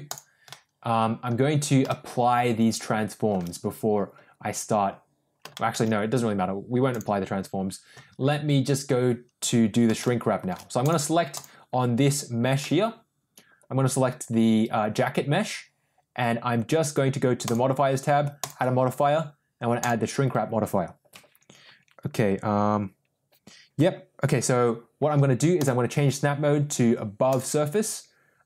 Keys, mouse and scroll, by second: 0.4-1.2 middle drag, 1.8-3.2 shift+middle drag, 5.4 shift+middle drag, 6.8 click, 9.9-10.4 shift+middle drag, 11.2 click, 12.5-15.3 middle drag, 18.3-20.0 drag, 25.6-27.5 drag.